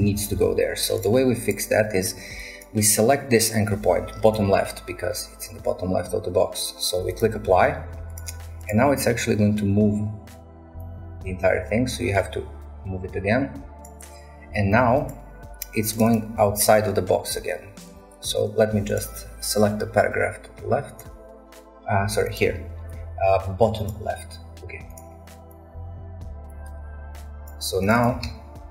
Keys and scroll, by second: 0.3 ctrl+z, 16.5-17.5 a, 28.2-28.7 typing.